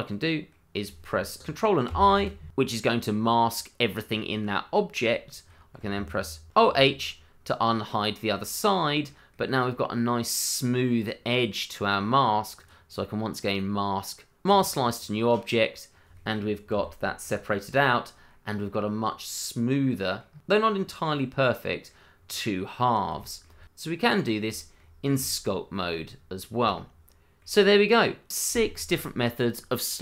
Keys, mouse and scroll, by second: 1.9 ctrl+i, 2.7 middle click, 5.2 shift+middle click, 5.5 middle click, 5.6 shift+middle click, 6.5 alt+h, 8.3 middle click, 12.5 click, 14.5 click, 14.9-15.3 scroll down 1, 15.3 middle click, 15.9 scroll up 1, 16.1 middle click, 16.7 g, 17.2 click, 17.9-18.3 scroll up 1, 18.3 middle click, 20.2-21.3 scroll up 1, 21.3 scroll down 1, 21.6 middle click, 22.2-23.1 scroll down 1, 23.1 shift+middle click, 24.3 scroll down 1, 24.8-25.8 scroll down 1, 26.2 middle click, 26.3 shift+middle click, 26.7 scroll up 1, 27.0 shift+middle click.